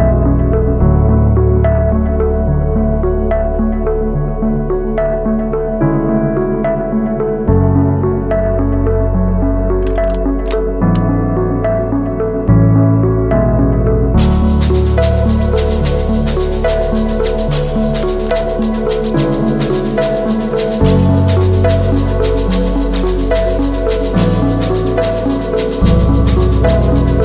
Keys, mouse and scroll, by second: 24.0 ctrl+t.